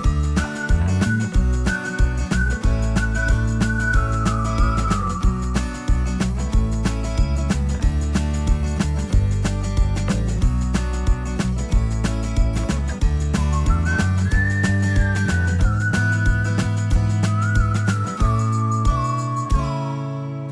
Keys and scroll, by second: 0.5 Escape, 0.7 Escape, 0.9 Escape, 2.0 space, 2.3 Escape, 2.4 Escape, 11.4 space.